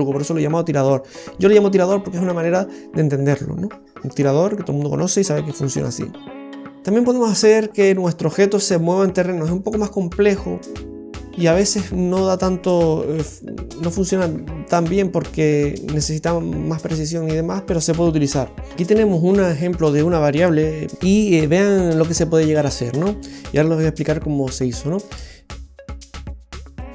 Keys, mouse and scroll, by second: 12.2 right click, 13.0 Delete, 13.8 right click, 14.3 Delete, 14.7 right click, 15.2 right click, 15.5 Delete, 15.9 right click, 16.2 Delete, 16.5 right click, 16.8 Delete.